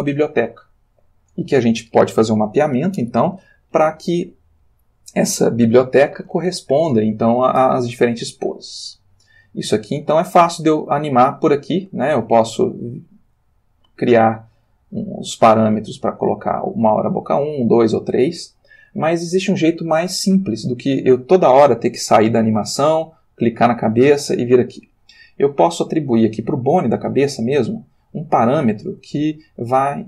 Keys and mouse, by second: 9.9-15.0 drag, 14.2 Escape, 16.3 click, 17.2 click, 22.0 click, 23.5 click, 25.7 click, 27.0 r, 28.1 Escape.